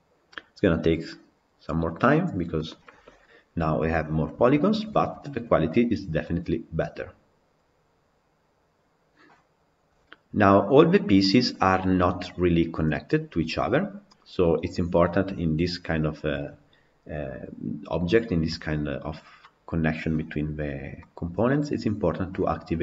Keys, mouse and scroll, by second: 1.5-2.4 drag, 2.4-4.2 middle drag, 4.2-4.7 scroll up 2, 4.7-8.1 shift+middle drag, 11.0-22.8 middle drag.